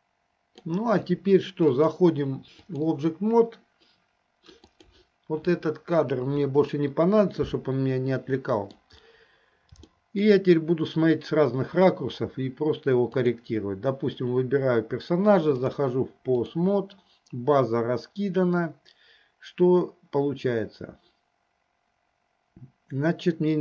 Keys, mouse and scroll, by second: 2.0-3.1 drag, 4.7 click, 7.5-9.0 middle drag, 10.1 shift+middle click, 13.2 click, 15.7-16.7 drag.